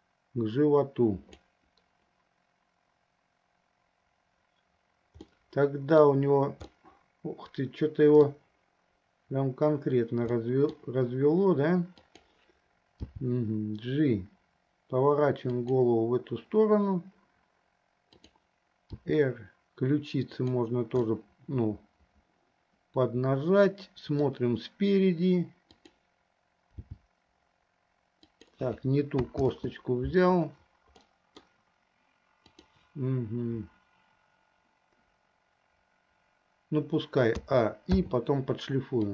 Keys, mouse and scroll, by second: 5.4 scroll up 1, 5.6-6.3 middle drag, 6.8-8.4 middle drag, 10.5-11.0 middle drag, 12.0 click, 13.2 g, 18.2 click, 19.1 r, 21.2-24.6 middle drag, 26.0 click, 27.1 g, 29.8 ctrl+z, 31.4-32.0 middle drag, 32.8 click, 37.6 a, 38.4 i.